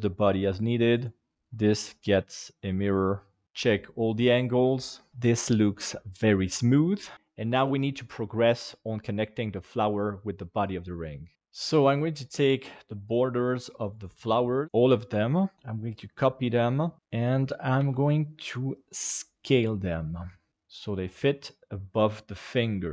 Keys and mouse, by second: 0.9 right click, 1.5-2.7 drag, 3.4 ctrl+KP_7, 5.1 KP_1, 7.9-8.2 middle drag, 8.9 middle click, 12.2 right click, 12.9 shift+right click, 13.4 shift+right click, 13.9 shift+right click, 14.5 shift+right click, 15.5 KP_7, 15.5 shift+d, 17.8 s, 20.5 g.